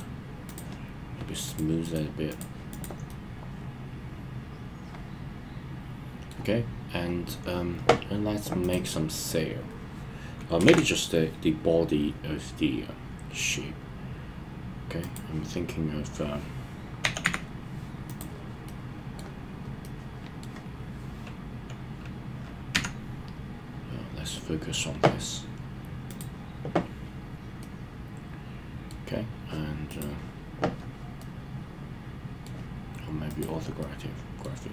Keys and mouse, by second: 0.0-0.6 right drag, 2.4 right click, 3.1-6.4 middle drag, 8.6 click, 10.6 shift+a, 17.0 g, 17.2 z, 18.1 click, 18.7-19.2 middle drag, 19.8-20.4 middle drag, 22.7 KP_Decimal, 26.1 click, 27.6-28.9 middle drag, 29.9 click, 31.2-32.5 middle drag, 33.8 middle click.